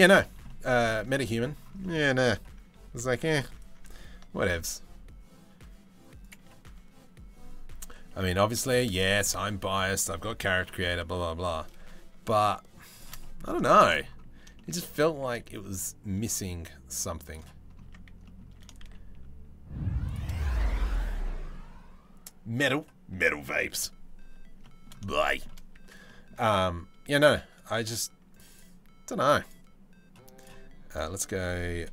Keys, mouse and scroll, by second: 0.1 middle click, 0.6 a, 0.8 middle click, 1.4 shift+middle click, 1.6 middle click, 2.7 ctrl+r, 4.0 ctrl+b, 8.1 i, 11.4 i, 12.8 middle click, 13.3 shift+middle click, 14.2 shift+middle click, 14.8 e, 17.5 Tab, 17.9 middle click, 18.2 s, 19.9 middle click, 24.2 middle drag, 24.9 shift+middle drag, 25.4 Tab, 25.7 middle click, 27.2 middle click, 27.9 right click, 28.1 right click, 30.1-31.9 right drag.